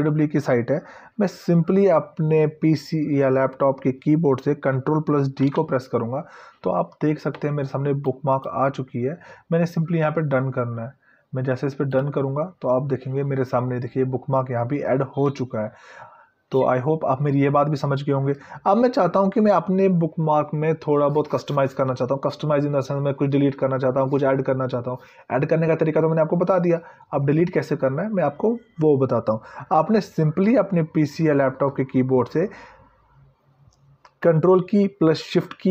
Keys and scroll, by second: 5.7 ctrl+d.